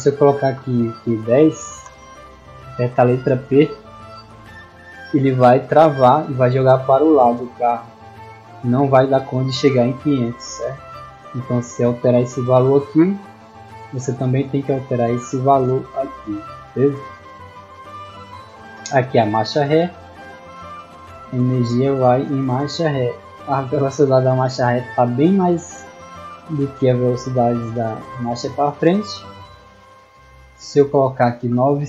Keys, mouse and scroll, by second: 1.7-2.6 typing, 18.2-21.0 middle drag, 29.3 click.